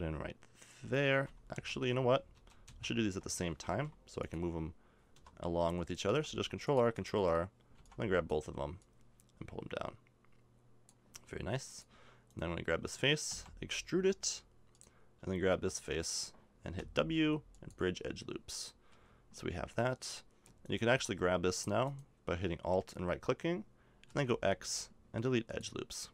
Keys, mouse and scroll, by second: 2.3 ctrl+z, 2.7 ctrl+z, 3.7 ctrl+r, 6.1 ctrl+r, 7.7 b, 8.8-10.9 drag, 11.7 click, 13.3 e, 16.8 w, 18.9 a, 24.0 x.